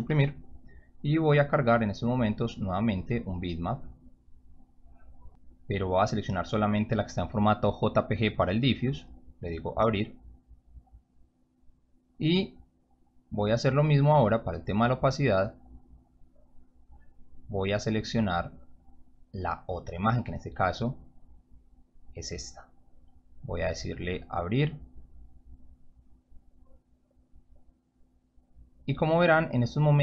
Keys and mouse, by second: 1.1-1.6 drag, 2.7 click, 4.0 click, 5.6 click, 8.9 click, 10.6-11.1 drag, 14.2-14.6 drag, 15.2-16.1 drag, 17.2 click, 18.4 click, 20.1 click, 25.3 click, 27.3-28.0 drag.